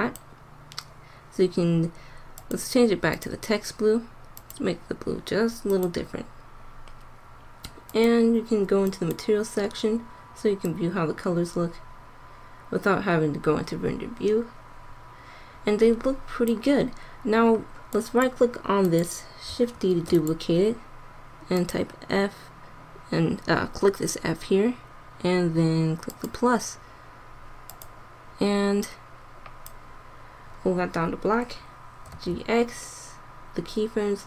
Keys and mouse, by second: 2.4-3.7 drag, 5.1 middle click, 7.6 middle click, 7.9 click, 9.6 middle click, 12.6-13.9 drag, 16.8-18.5 drag, 19.8 shift+d, 26.1-29.5 drag, 32.0 g.